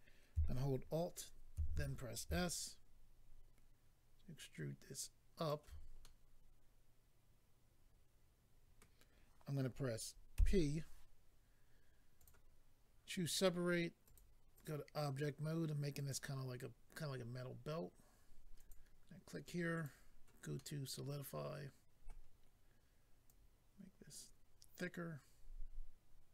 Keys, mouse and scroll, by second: 1.5 alt+s, 5.4 shift+click, 6.0 middle click, 12.2 click, 12.2 click, 14.0 click, 14.2 click, 14.5 click, 14.6 click, 15.9 click, 16.1 click, 18.6 click, 18.7 click, 19.7 click, 19.8 click, 20.5 middle click, 23.2 click.